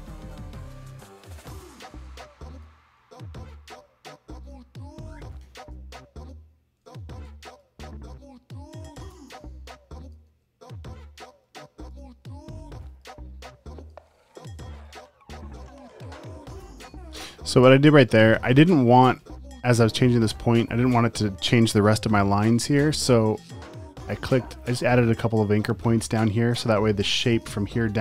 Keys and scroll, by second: 0.0-3.0 typing, 5.4 p, 7.0 super+z, 10.4 super+z, 14.1 super+z, 18.2 super+z.